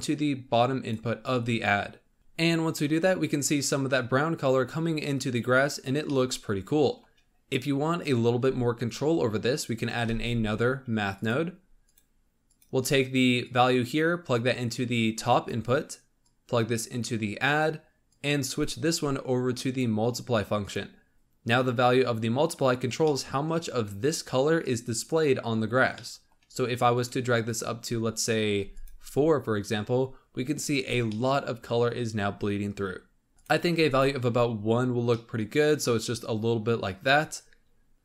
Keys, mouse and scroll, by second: 1.3-1.7 scroll up 1, 6.0-8.4 middle drag, 8.4-8.9 scroll up 4, 8.9-10.0 middle drag, 10.0 shift+a, 13.4-21.1 drag, 23.0 middle click, 23.4-24.0 scroll up 1, 24.0 click, 25.9 middle click, 26.9-28.8 drag, 31.0-33.3 middle drag, 33.3 click, 35.1-37.9 middle drag.